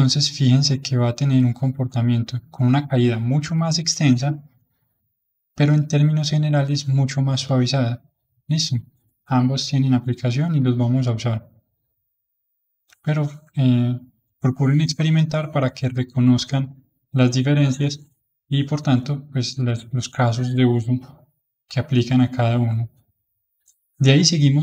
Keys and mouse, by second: 5.1-8.1 drag, 9.7-11.1 middle drag, 11.1-14.1 drag, 17.3-23.7 middle drag, 23.7-24.6 drag.